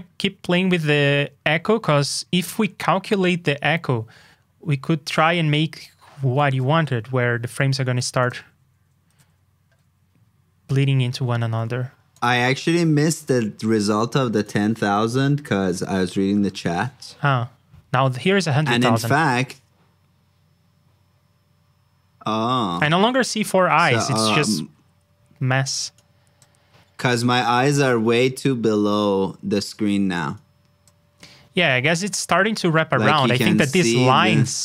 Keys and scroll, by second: 15.3 super+c, 15.9 super+v.